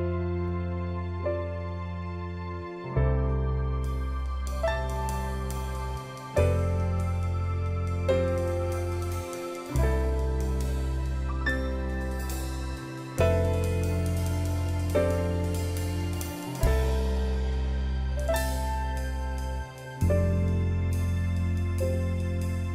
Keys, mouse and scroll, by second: 11.1 ctrl+i, 14.2 ctrl+click, 17.6 Up, 17.8 Up, 18.0 Up, 18.3 Up, 20.1 ctrl+t, 22.5 ctrl+z.